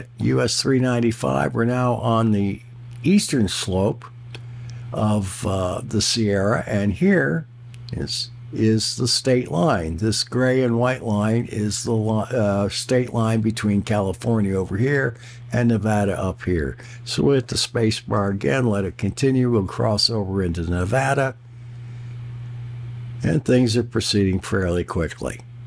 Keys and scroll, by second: 18.2 space.